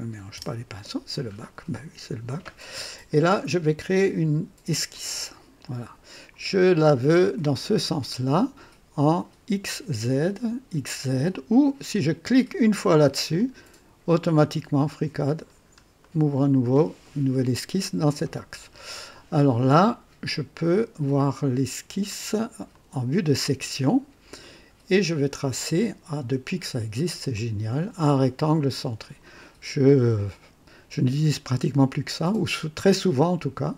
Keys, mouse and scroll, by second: 0.0-0.7 typing, 4.9 click, 6.4-7.0 scroll down 2, 8.7 click, 13.0 click, 15.3-15.8 scroll up 2, 15.9-16.8 right drag, 22.6 click, 23.7-24.1 scroll up 3, 24.3-25.0 right drag, 27.2 click, 28.7 click, 29.7 scroll up 2, 30.2 right click, 33.1 click.